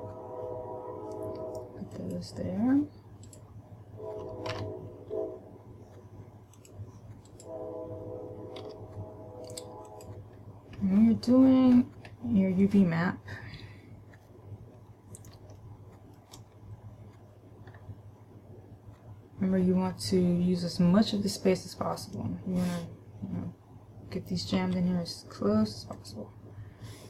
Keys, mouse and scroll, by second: 0.3 g, 2.5 click, 3.6 right click, 5.0 a, 7.0 click, 7.5 right click, 9.0 g, 10.5 click, 11.2-12.0 scroll up 1, 12.5-14.1 scroll up 1, 15.7 Return, 16.0 middle click, 16.5 Return, 17.4 Return, 18.1-18.5 scroll down 2, 25.0 g, 26.5 click.